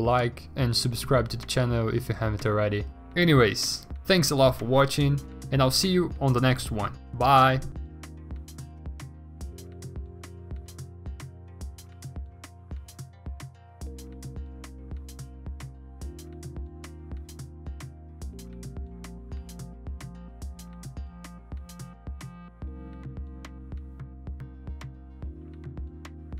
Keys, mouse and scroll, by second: 6.6 ctrl+alt+g, 6.7-9.0 typing, 9.9-10.3 scroll, 12.0 b, 12.3 x, 12.6 ctrl+z, 12.9 w, 13.4 ctrl+d, 13.7 w, 15.3 b, 16.3 ctrl+d, 20.5-23.1 typing, 23.4 ctrl+a, 25.9 ctrl+d.